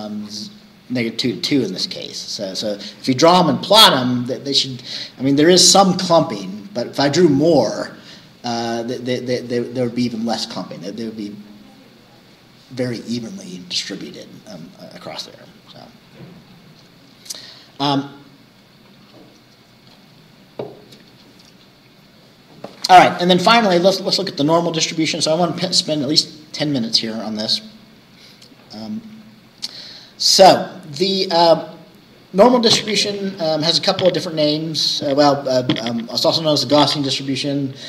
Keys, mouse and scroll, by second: 3.2 scroll up 2, 16.1-16.9 scroll down 4, 24.8-25.2 scroll down 2.